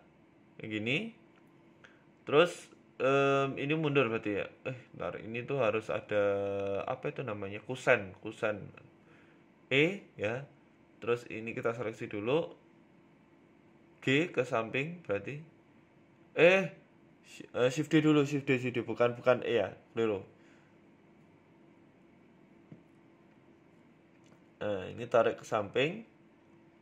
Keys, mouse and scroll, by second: 0.0 middle click, 0.2 z, 0.7 middle click, 0.9-1.9 scroll up 5, 1.1 middle click, 2.2 middle click, 2.2 scroll down 3, 3.0 scroll down 2, 3.4 KP_1, 3.7 scroll up 4, 3.9 middle click, 4.1-4.7 scroll down 2, 4.6 right click, 5.0 KP_1, 5.2 Tab, 5.5 scroll up 1, 6.2 right click, 7.9 click, 8.5 right click, 8.7 middle click, 9.5 shift+right click, 9.9 KP_1, 10.9 e, 12.3 middle click, 13.0 right click, 13.5 KP_3, 14.1 KP_1, 14.8 g, 15.7 ctrl+z, 16.4 ctrl+z, 17.2 shift+d, 18.8 middle click, 19.8 right click, 20.4 ctrl+z, 20.5 ctrl+z, 20.7 ctrl+z, 21.3 middle click, 22.0 KP_1, 22.3 e, 23.1 right click, 23.3 middle click, 23.9 right click, 24.6 KP_3, 24.8 KP_1, 25.5 g.